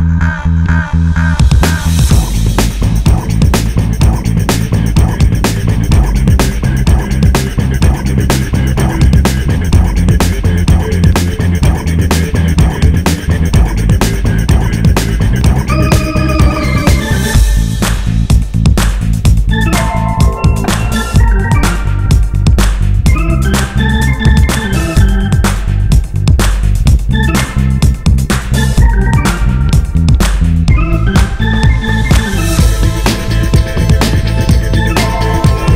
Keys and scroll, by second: 12.9 super+c, 13.0 super+v, 29.6 z, 30.6 super+z, 34.2 super+z.